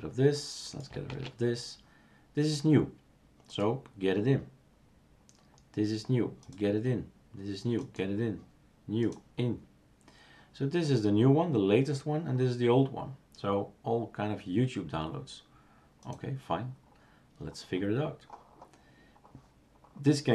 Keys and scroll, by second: 1.2 shift+super+q.